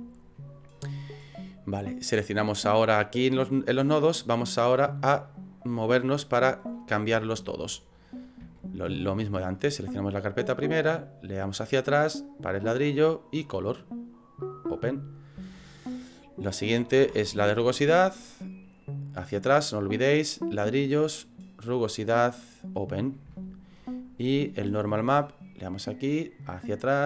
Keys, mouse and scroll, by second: 2.1 right click, 3.9 click, 5.4 click.